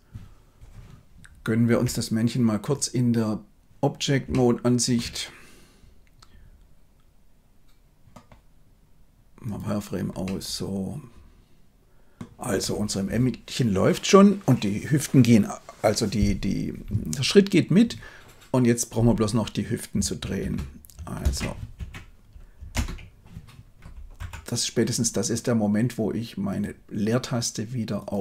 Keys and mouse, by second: 4.1 shift+Tab, 4.2-4.9 shift+middle drag, 9.3 click, 10.1-12.1 middle drag, 20.4 space, 22.6 space, 24.1 Left, 26.5-28.2 drag.